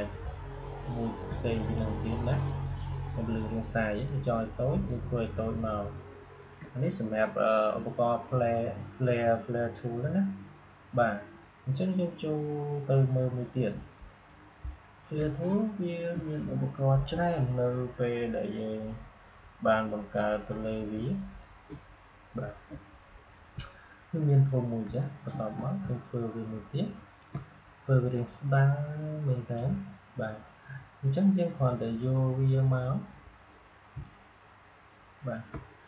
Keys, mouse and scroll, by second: 0.2-1.5 alt+shift+drag, 5.2-8.8 alt+shift+drag, 13.9 alt+shift+click, 14.2-17.5 alt+drag, 20.4-23.7 drag, 24.7 click, 25.5-28.0 alt+drag, 28.0-32.0 drag, 33.8-35.8 drag.